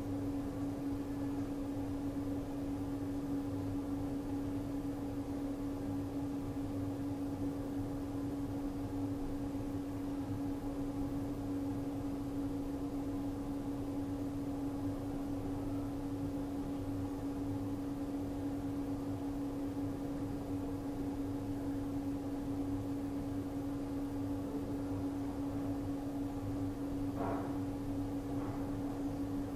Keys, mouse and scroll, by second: 0.2-0.7 typing, 3.0 click, 5.6 click, 8.8 r, 9.5 alt+Num_Lock, 10.1-11.1 typing, 12.9-15.3 typing, 13.4 alt+click, 15.1 click, 17.9 r, 18.5 click, 19.1-19.5 typing, 20.7 click, 23.1 r, 23.4 alt+click, 24.0 ctrl+d, 24.1-24.4 typing, 26.0 v, 26.3 click, 27.7 r, 28.3 click, 28.9 click, 29.3-29.5 typing.